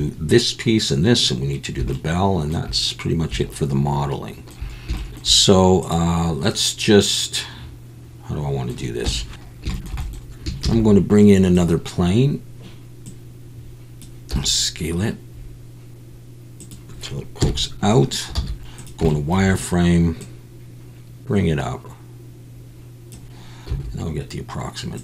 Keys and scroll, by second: 9.4 Tab, 10.6 shift+a, 14.3 s, 17.4 KP_1, 18.3 z, 23.7 s.